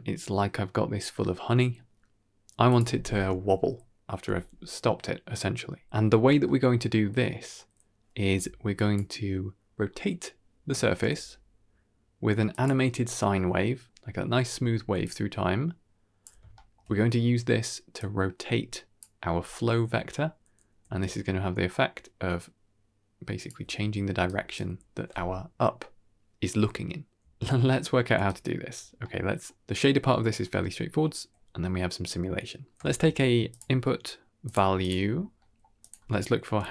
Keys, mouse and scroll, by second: 6.3 middle click, 6.8 scroll up 3, 7.1 middle click, 8.2 g, 11.6 g, 14.8 d, 14.9-16.1 drag, 16.1 d, 16.4 shift+middle click, 17.9-18.9 drag, 20.7 d, 20.9-23.4 drag, 23.4 d, 23.6 d, 24.0 d, 24.1 click, 24.1 right click, 27.5 ctrl+s, 27.5 shift+space, 27.6 middle click, 28.0 d, 28.1-28.6 drag, 28.1 right click, 28.6 d, 28.9 middle click, 30.8 scroll up 1, 32.5 click, 32.7 shift+a, 35.0-35.5 scroll up 3, 35.3 middle click, 35.7-36.7 drag.